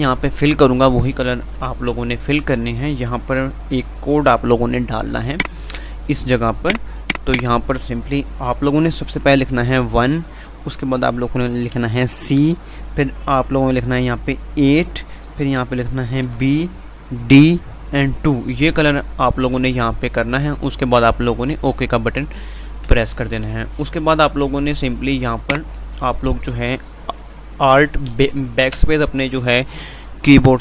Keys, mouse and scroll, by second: 24.1 F5, 25.6 click, 28.3 BackSpace.